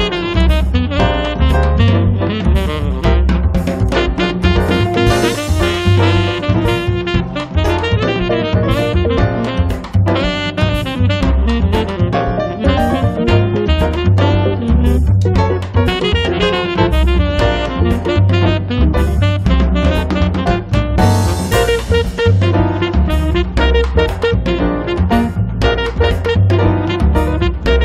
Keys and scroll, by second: 0.4 m, 3.8 Right, 4.1 Left, 9.3 space, 19.4 l, 22.1 a, 24.1-25.5 typing, 27.6-27.8 typing.